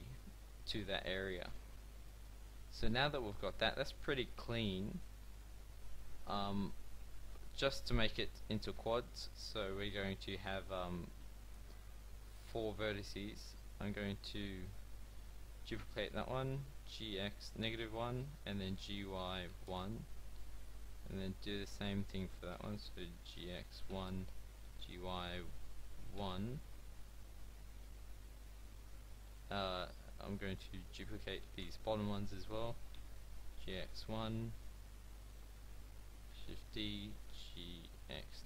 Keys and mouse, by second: 6.9 KP_7, 7.8 middle click, 9.9 click, 15.6 shift+d, 16.8 g, 18.7 g, 21.2-23.2 drag, 22.6 shift+d, 23.2 g, 24.7 g, 27.7 a, 29.3 click, 30.9 shift+d, 32.1 g, 36.2 shift+d, 37.3 g.